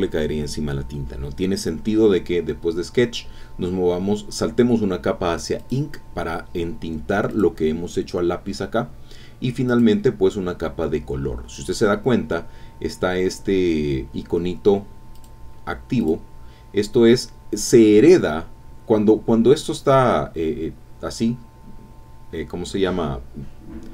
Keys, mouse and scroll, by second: 5.6 click, 7.3 click, 9.7 click, 15.1 click, 16.0 click.